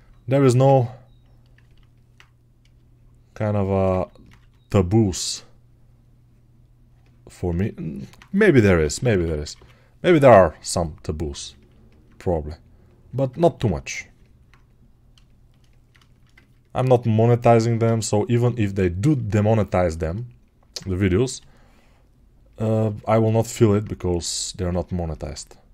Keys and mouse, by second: 14.0 alt+right click, 18.9-24.6 ctrl+alt+right drag.